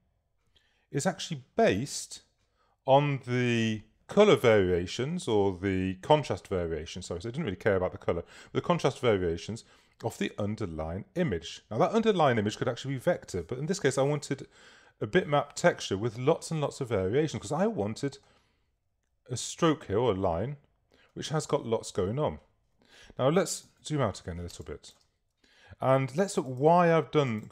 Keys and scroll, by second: 23.7 super+-, 24.7 super+space.